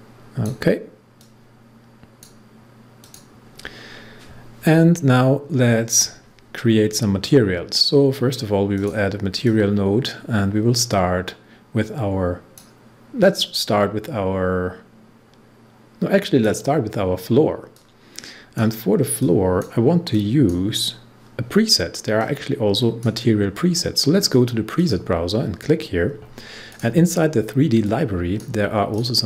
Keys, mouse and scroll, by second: 5.8 click, 8.7-29.2 drag.